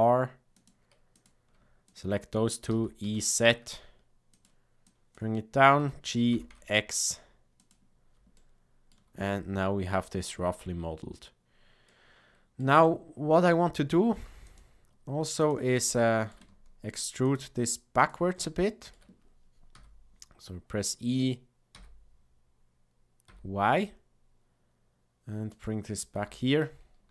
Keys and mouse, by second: 1.8 shift+click, 2.6 e, 4.8 click, 5.7 g, 8.3 shift+middle click, 11.8 middle click, 12.8 shift+middle click, 14.5 click, 15.3 ctrl+click, 15.9 shift+middle click, 18.0 ctrl+click, 18.6 shift+middle click, 19.7 e, 26.1 z.